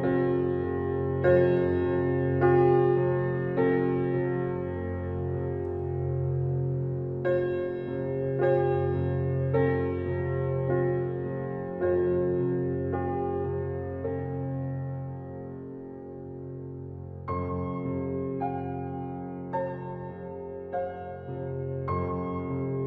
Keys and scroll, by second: 14.5 ctrl+i.